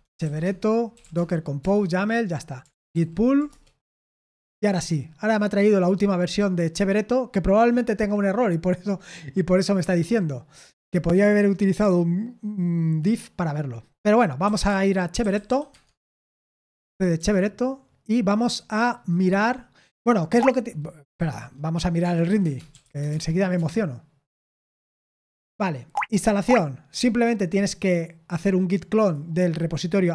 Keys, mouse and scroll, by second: 0.0-2.3 typing, 2.6 ctrl+p, 2.9 ctrl+p, 3.4 Return, 14.1-15.9 typing, 17.1 Return, 20.3-23.3 typing, 23.5 Return, 24.4 Return, 25.8-27.7 scroll up 3, 27.7-28.8 drag, 29.0 click.